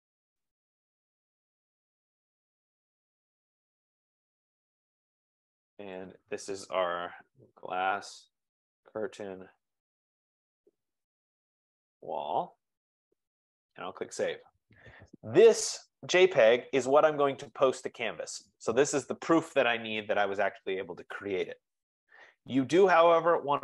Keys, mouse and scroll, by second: 0.1 click, 1.2 click, 1.3 click, 3.2 click, 3.4 click, 4.5 click, 4.6 click, 6.2 click, 7.1-12.9 typing, 13.0 Return, 14.6-15.4 typing.